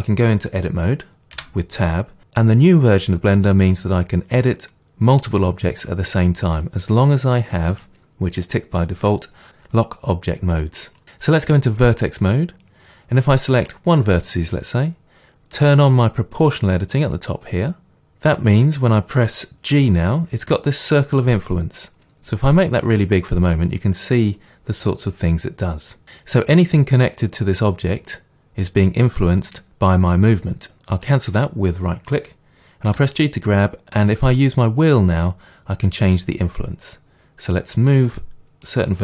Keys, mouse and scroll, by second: 1.4 Tab, 7.7-11.6 drag, 12.3-13.7 scroll up 2, 13.7-17.3 drag, 19.7 g, 31.1 right click, 32.9 g, 38.0 click, 38.7 click.